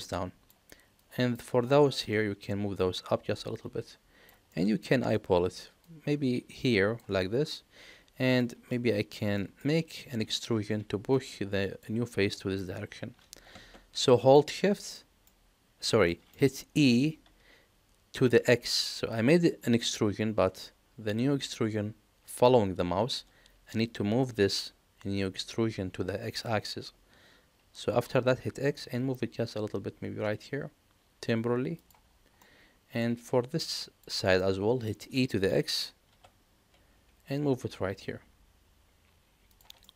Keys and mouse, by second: 1.0 click, 1.7 click, 2.8-4.2 drag, 4.4 middle click, 5.8-6.9 drag, 7.5 middle click, 8.7 shift+middle click, 9.3 middle click, 14.0 middle click, 14.9 middle click, 16.0 middle click, 16.7 e, 32.4 middle click, 33.5 click, 34.3 middle click, 35.4 middle click, 36.0 e, 39.8-39.9 middle drag.